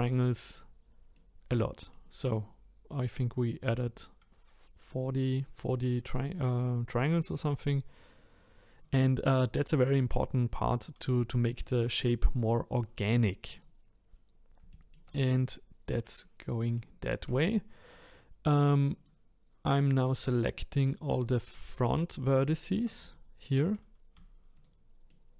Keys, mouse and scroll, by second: 0.3-4.1 middle drag, 5.7-8.7 middle drag, 8.7 click, 9.4-12.5 middle drag, 13.5 click, 14.1-14.7 scroll up 2, 14.7-16.8 shift+middle drag, 18.9 click, 19.7 click, 20.3-21.5 middle drag, 21.5 shift+click, 22.2 shift+click, 23.1-24.5 shift+middle drag, 24.5 shift+click, 25.1-25.3 shift+middle drag.